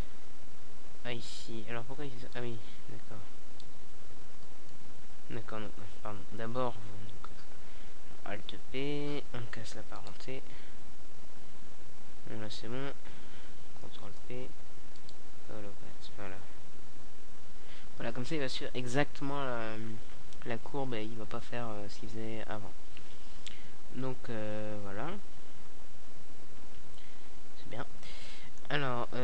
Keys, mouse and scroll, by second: 2.0 alt+p, 7.0 ctrl+p, 9.6 alt+a, 21.1 alt+a, 21.9 KP_0, 23.5 middle click, 25.9 right click.